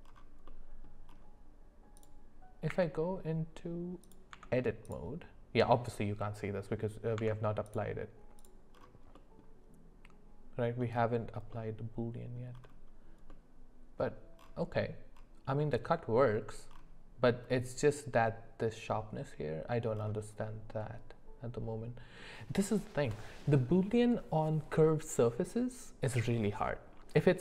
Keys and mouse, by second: 0.4 middle click, 2.7 q, 4.0 click, 4.3 Tab, 7.1 Tab, 8.4 click, 9.1 middle click, 11.5 middle click, 13.3 middle click, 15.6 middle click, 20.4-22.2 middle drag.